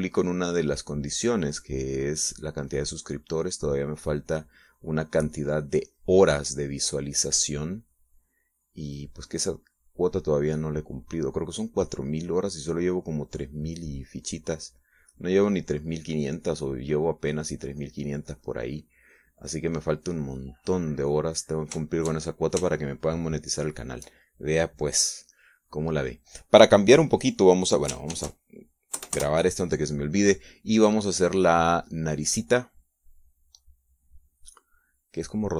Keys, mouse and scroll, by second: 4.5-5.8 drag, 6.0-7.2 drag, 18.6-20.6 drag, 20.7 middle click, 21.7 click, 23.2 shift+middle click, 24.1 shift+middle click, 25.0 shift+middle click, 29.5 ctrl+shift+s, 30.3 KP_Add, 30.5 KP_Enter, 32.8-35.5 drag.